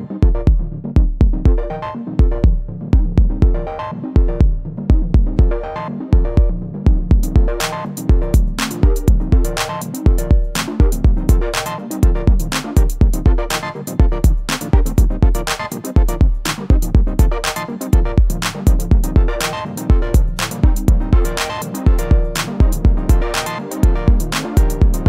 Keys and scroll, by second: 0.1 ctrl+r, 4.5 ctrl+r, 8.8 ctrl+r, 13.4 ctrl+r, 19.7 /.